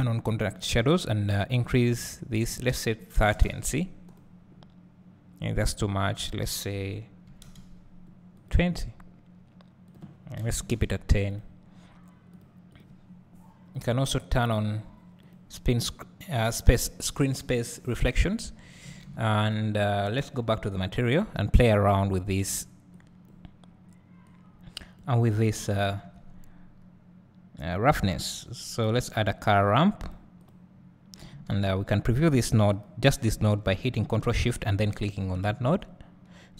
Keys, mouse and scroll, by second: 4.1 click, 8.4 click, 11.3 click, 15.3 click, 18.4 scroll up 1, 19.6 click, 22.2 click, 32.5 s, 32.8 click, 35.3 ctrl+shift+click.